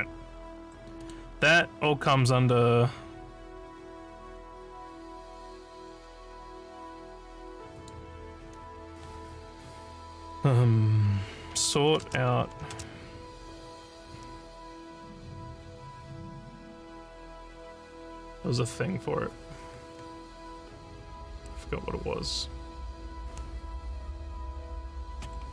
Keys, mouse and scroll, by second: 1.0 click, 7.8 click, 11.3-12.8 typing.